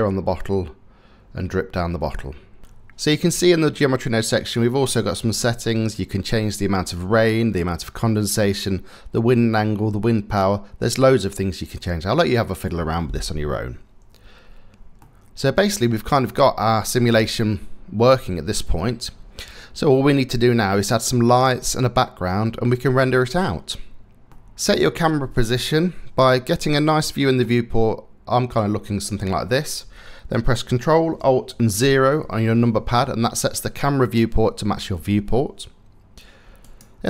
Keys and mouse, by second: 2.6 space, 14.6-15.6 drag, 16.9 space, 24.3 click, 25.8-27.0 drag, 31.4 ctrl+alt+KP_0.